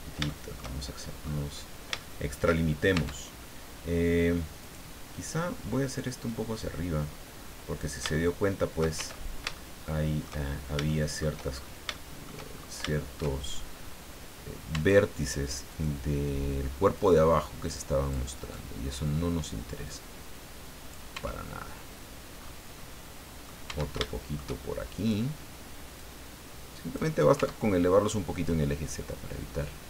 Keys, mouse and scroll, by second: 0.3 shift+middle click, 1.2-1.5 scroll up 2, 2.0 shift+middle click, 2.9 shift+Tab, 4.6 right click, 6.2-8.0 drag, 8.1 shift+middle click, 9.0 shift+Tab, 9.5 shift+middle click, 10.5 shift+scroll down 1, 10.8 shift+middle click, 11.5 shift+scroll up 2, 11.9 shift+middle click, 12.5-12.9 shift+scroll up 2, 12.9 shift+middle click, 14.7 Tab, 15.7 right click, 16.9-18.3 drag, 18.3 right click, 19.8-21.1 drag, 21.1 Tab, 21.6-21.9 scroll down 1, 22.4-22.7 scroll up 1, 22.8 middle click, 23.7 Tab, 24.1 shift+middle click, 24.9 right click, 26.0 click, 27.3 Tab, 27.8 scroll down 2, 28.5-29.8 middle drag.